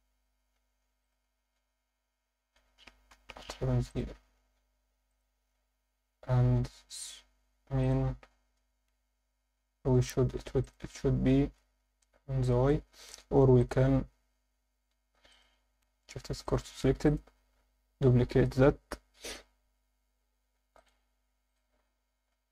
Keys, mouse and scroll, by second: 1.0 click, 3.1 KP_7, 3.8 click, 5.1 click, 7.8 click, 10.6-12.3 drag, 12.4 alt+shift+middle drag, 13.6 click, 15.3 click, 17.1 click, 20.8-21.6 drag.